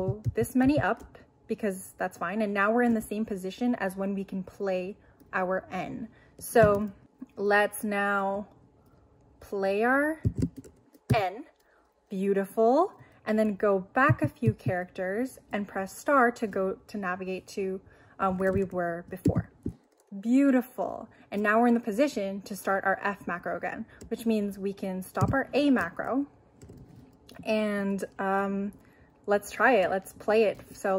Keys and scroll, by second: 0.0 k, 10.3 shift+2, 11.1 shift+n, 14.1 h, 19.3 shift+8, 25.2 q.